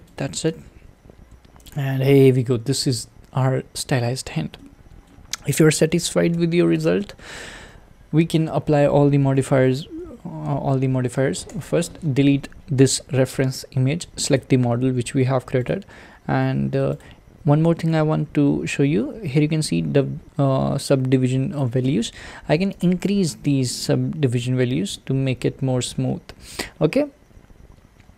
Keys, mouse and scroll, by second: 0.2 click, 1.8 alt+z, 2.7-4.6 scroll down 4, 4.6-6.3 shift+middle drag, 6.3 Tab, 6.9 click, 11.5 x, 14.4 click, 22.8-24.5 drag, 24.5-26.4 scroll up 3.